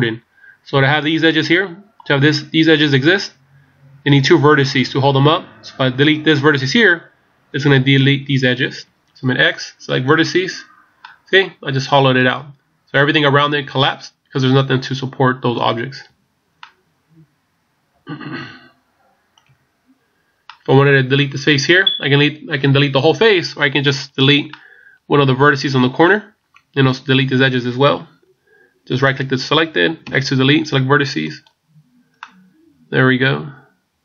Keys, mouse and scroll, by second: 9.4 x, 11.0 middle click, 16.1 a, 16.6 middle click, 19.5 a, 20.4 middle click, 23.9 right click, 24.5 middle click, 29.0 right click, 30.0 x, 32.2 middle click.